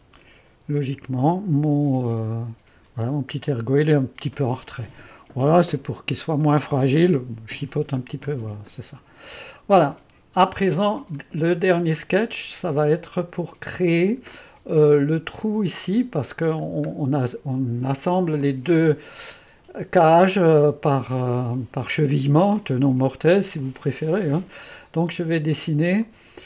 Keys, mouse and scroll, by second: 0.0-0.5 typing, 2.2 KP_3, 8.8-11.5 drag, 16.7-17.8 scroll down 1, 18.5-22.2 drag, 23.7-25.2 drag, 26.1-26.4 drag.